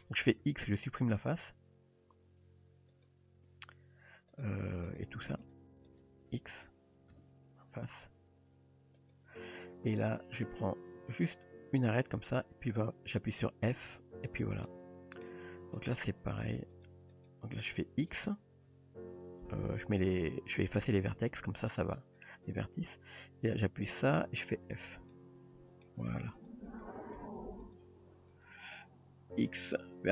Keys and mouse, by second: 0.3 x, 4.3 click, 5.4 shift+click, 5.9 shift+click, 7.1 x, 10.4 click, 11.2 click, 13.8 f, 14.7-15.3 middle drag, 15.7 click, 16.4 shift+click, 16.8 shift+click, 17.2 shift+click, 18.7 x, 23.6 click, 24.7 f, 25.2-25.8 middle drag, 26.7 shift+click, 27.2 shift+click, 27.7 shift+click, 28.3 shift+click, 29.4 x.